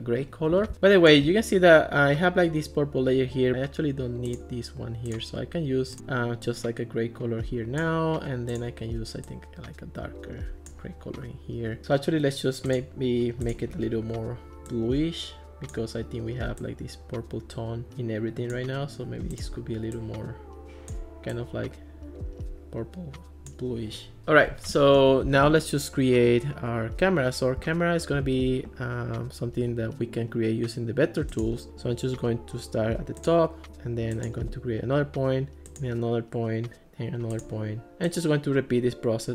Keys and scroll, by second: 24.2 Escape.